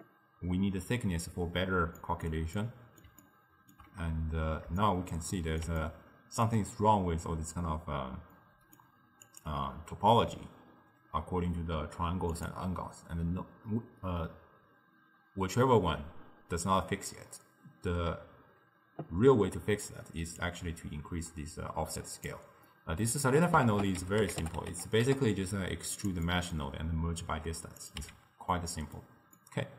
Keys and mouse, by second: 2.1-9.8 middle drag, 9.8 click, 13.0 click, 20.4-22.7 drag, 22.7-23.7 middle drag, 23.7 ctrl+a, 26.3-27.9 middle drag, 27.9 click, 28.1 x, 28.6-29.7 middle drag.